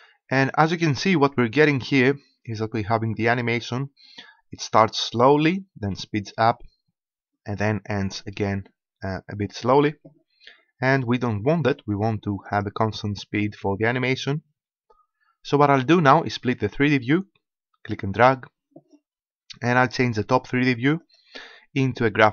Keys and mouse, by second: 12.4-14.6 drag, 16.8-20.0 drag, 21.0-22.3 drag.